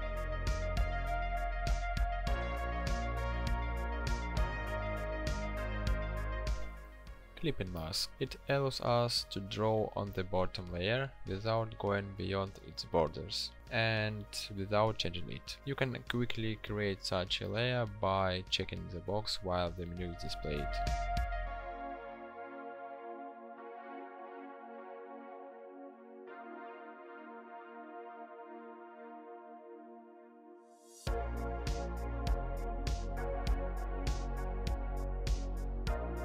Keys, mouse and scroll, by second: 14.5 ctrl+shift+n.